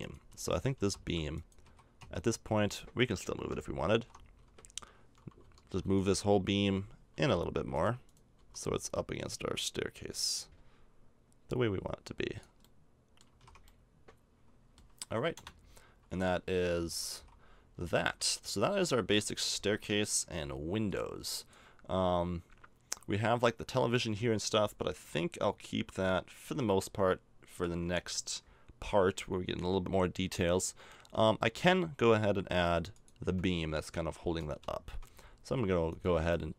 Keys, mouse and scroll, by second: 0.3 Tab, 0.7 Tab, 1.0 a, 1.6 a, 2.0 Tab, 3.9 alt+h, 4.4 a, 5.4 l, 5.9-7.2 right drag, 6.3 a, 7.1 l, 7.7 right click, 8.3 l, 13.2 a, 13.4 Tab, 15.3 KP_0, 16.8 a, 17.1 a, 17.5-18.8 middle drag, 19.0 middle click, 19.1-20.4 middle drag, 20.8-26.6 drag, 22.7-26.6 right drag, 26.6-32.9 middle drag, 32.9-34.6 drag, 34.6 shift+a.